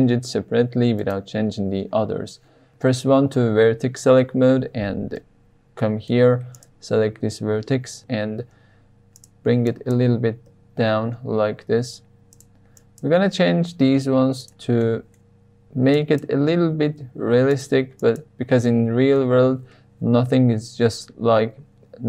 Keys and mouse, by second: 1.0 click, 5.2-6.1 shift+middle drag, 8.0 g, 8.0 z, 9.1 click, 9.7 click, 10.4 g, 11.0 z, 12.3 drag, 12.9 click, 13.4 g, 13.9 z, 14.4 click, 14.8 shift+middle click, 16.1 click, 16.6 g, 17.3 z, 17.5 click, 18.1 click, 18.7-19.1 shift+middle drag.